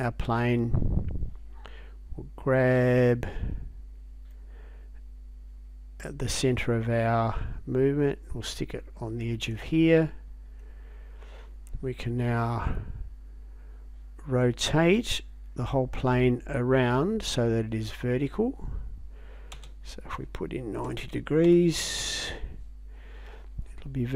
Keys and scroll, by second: 19.6 space, 21.1 9, 21.5 0, 22.0 Return.